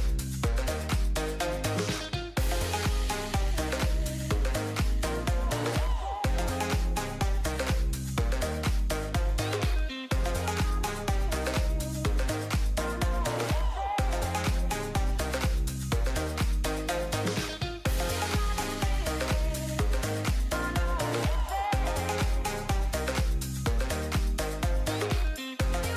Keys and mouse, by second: 3.5 ctrl+s, 4.1 click, 4.6 click, 4.9 shift+drag, 5.4 drag, 5.5-6.5 middle drag, 6.8-7.3 shift+middle drag, 7.4 shift+middle drag, 8.0-8.4 middle drag, 8.7 middle drag, 9.2 middle drag, 9.9 shift+drag, 10.1 middle click, 10.8 click, 11.8 click, 16.6 click, 17.0 click, 17.3 click, 18.3 ctrl+s, 19.1 shift+a, 21.2 shift+a, 23.4-24.0 drag, 24.7 click.